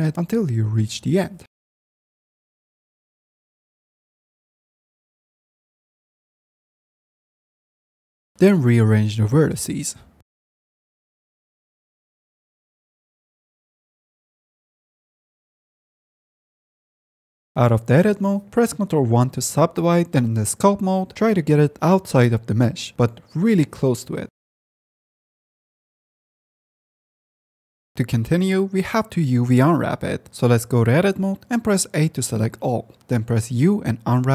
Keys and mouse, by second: 0.4 click, 1.2 click, 2.2 click, 2.8 click, 5.0 middle click, 6.2 middle click, 6.8 ctrl+click, 7.5 click, 8.2 click, 8.5 click, 8.9 click, 9.7 click, 10.2 click, 10.7 click, 11.2 click, 11.5 click, 11.8 click, 12.0 click, 12.2 shift+middle click, 12.6 click, 13.2 shift+middle click, 13.4 click, 14.1 middle click, 14.3 middle click, 14.4 shift+middle click, 14.6 click, 14.7 middle click, 15.1 click, 15.6 shift+middle click, 16.1 click, 16.4 click, 16.6 Tab, 17.1 g, 17.2 ctrl+z, 17.4 click, 18.9 ctrl+1, 20.1 ctrl+z, 20.4 ctrl+Tab, 20.7 middle click, 20.9 middle click, 21.3 f, 21.7 middle click, 22.0 click, 22.7 click, 24.1 click, 24.7 click, 25.5 f, 25.9 click, 26.2 click, 26.6 click, 27.2-28.8 drag, 30.2 Tab, 30.6 a, 33.3 u, 33.8 u.